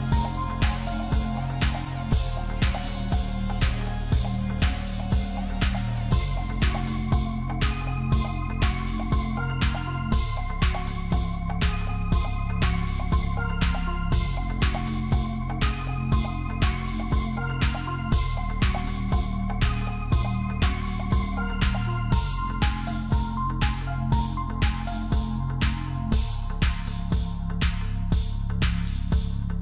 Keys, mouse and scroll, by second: 0.1 KP_1, 1.6 shift+z, 2.3 scroll up 2, 4.4 Tab, 5.2 Tab, 6.3 shift+z, 7.8 click, 8.5 Tab, 9.0 click, 9.7 Tab, 13.1 click, 14.7 alt+shift+click, 16.6 shift+z, 17.7-18.3 scroll up 1, 18.3 shift+z, 18.6-19.1 scroll up 1, 19.1 ctrl+b, 21.9-22.5 scroll up 1, 22.5 e, 25.2-26.0 scroll down 5, 25.4 Tab, 26.0-27.3 scroll up 6, 26.2 Tab, 27.3 ctrl+r, 28.9 ctrl+r.